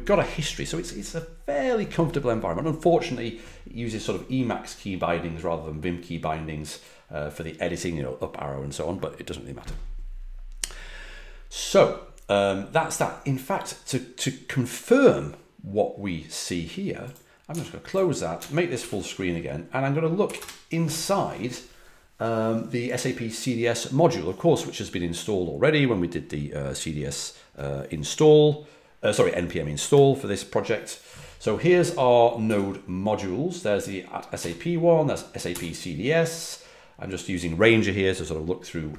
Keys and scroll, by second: 18.8 alt+super+f, 20.2 typing, 32.4 typing, 34.3 typing, 35.5 typing.